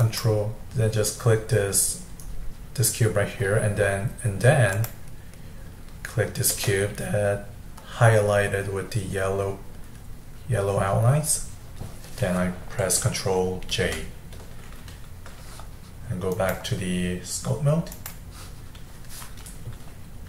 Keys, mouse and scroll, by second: 0.0 click, 4.7 shift+click, 13.8 ctrl+j, 16.3-19.5 drag.